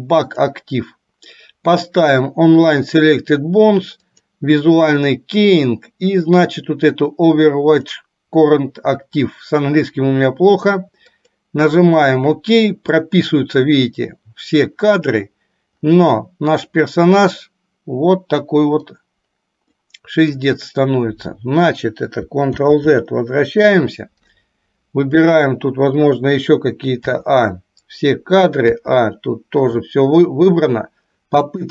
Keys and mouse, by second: 16.4-19.1 middle drag, 20.0 middle click, 22.8 ctrl+z, 27.1 a, 28.9 a, 31.6-31.7 drag.